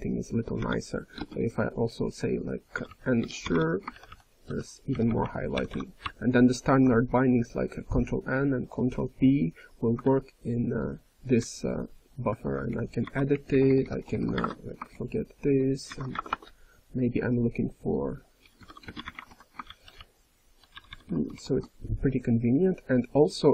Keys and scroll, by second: 3.9 ctrl+n, 4.0 ctrl+n, 4.4 ctrl+n, 4.9 ctrl+n, 5.0 ctrl+n, 5.5 ctrl+p, 5.7 ctrl+p, 6.0-6.7 ctrl+p, 9.9-10.7 ctrl+n, 11.3 ctrl+p, 11.8-12.6 typing, 12.6 ctrl+a, 14.3 alt+BackSpace, 16.1 alt+BackSpace, 19.7 ctrl+n, 19.9-20.6 ctrl+n, 20.7 ctrl+p, 20.9 ctrl+p, 21.1 ctrl+p, 21.1 ctrl+p, 21.3 ctrl+p.